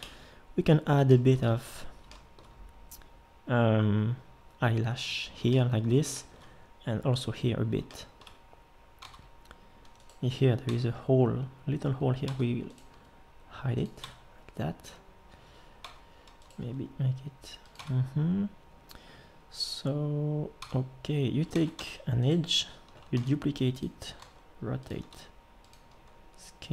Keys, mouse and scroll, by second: 0.0 Escape, 9.0 Tab, 10.7 Tab, 12.2 Tab, 12.9 g, 14.0 Tab, 15.8 Tab, 16.6 g, 17.8 Tab, 20.6 Tab, 21.5 ctrl+Tab, 23.1 shift+d, 24.2 r, 25.0 s.